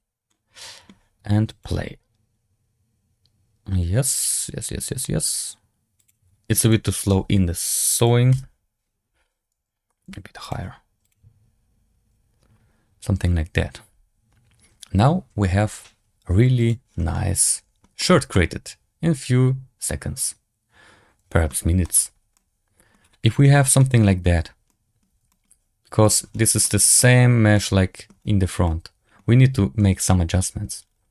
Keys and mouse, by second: 0.3-0.9 drag, 1.4 click, 6.2-6.9 drag, 8.0 click, 9.9 g, 10.9 click, 17.1-17.7 middle drag, 17.9 shift+drag, 18.2-21.4 middle drag, 21.7 shift+middle drag, 22.3-22.8 middle drag, 23.7 middle drag, 24.6 middle drag, 25.2 shift+drag, 26.5-26.9 middle drag, 27.4-28.0 middle drag, 28.5-29.1 middle drag.